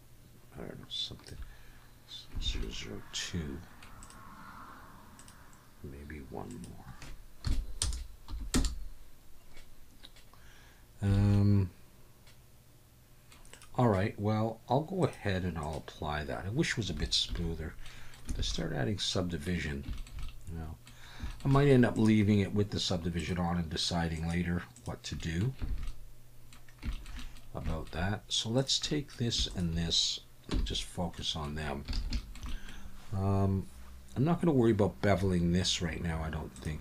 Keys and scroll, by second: 2.4 alt+a, 11.2 alt+a, 17.4 ctrl+1, 18.4 alt+a, 25.7 alt+a, 30.5 /, 31.9 alt+a.